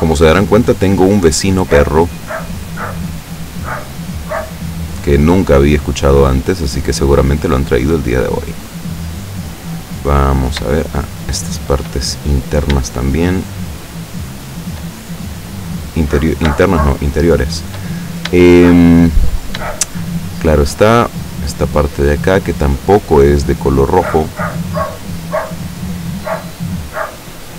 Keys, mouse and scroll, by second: 0.2 middle click, 1.5 right click, 2.0 shift+right click, 3.3 shift+right click, 4.3 shift+right click, 4.8 shift+right click, 5.4 shift+right click, 5.8 shift+right click, 6.7 shift+right click, 7.1 shift+right click, 8.2-9.5 shift+middle drag, 9.6-10.9 middle drag, 11.1 shift+right click, 11.5 shift+middle click, 12.1 shift+middle click, 13.5 shift+right click, 13.9 shift+right click, 14.5 shift+right click, 15.0-16.3 shift+middle drag, 17.0 shift+middle click, 18.4 shift+scroll down 1, 18.6 shift+middle click, 20.1 shift+middle click, 21.1 shift+right click, 21.6 shift+right click, 22.3 shift+right click, 22.8 shift+right click, 23.3 shift+right click, 24.0 shift+right click, 24.4 shift+right click, 25.0 shift+right click, 25.8 shift+right click, 26.5 shift+middle click, 27.2 shift+right click.